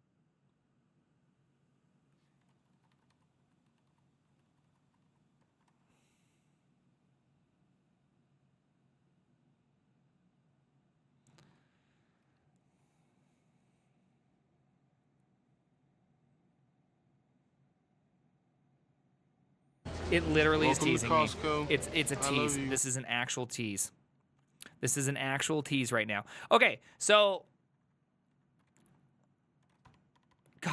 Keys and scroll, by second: 2.8 ctrl+a, 3.0 [, 3.2 ctrl+u, 3.4 ctrl+u, 3.7 ctrl+u, 3.9 ctrl+u, 4.3 ctrl+u, 4.7 ctrl+u, 4.9 ctrl+u, 5.1 ctrl+u, 5.5 ctrl+d, 5.7 shift+a, 27.0 Up, 27.5 ctrl+Left, 27.7 ctrl+Left, 27.9 ctrl+Left, 28.0 ctrl+Left, 28.7 ctrl+w, 29.4-30.7 typing, 30.4 Tab.